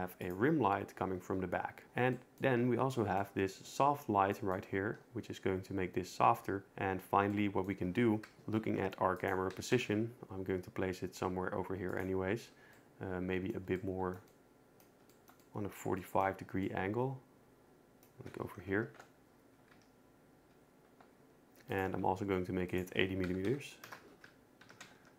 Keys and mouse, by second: 0.2-1.6 drag, 2.9 middle click, 8.3 KP_0, 9.2 click, 9.5 g, 9.7 z, 9.9 z, 11.9-12.5 drag, 12.8 middle click, 16.6 middle click, 18.7 ctrl+alt+KP_0, 19.7 g, 21.7 shift+click, 22.8-23.9 drag, 24.6 g, 24.8 z, 25.0 z.